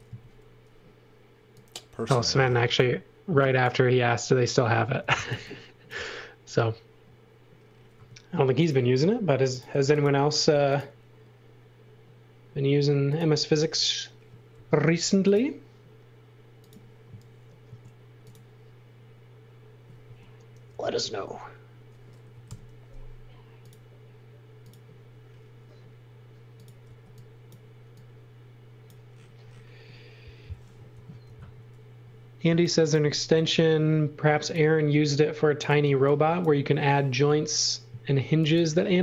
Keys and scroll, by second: 5.0 x, 5.3 v, 8.0 space, 9.9 x, 10.3 f, 14.5 l, 17.7 a, 20.1 space, 20.8 a, 22.3 4, 22.5 Return, 26.9 e, 30.9 super+z, 32.5 x, 33.4 l, 35.9 e, 38.2 x.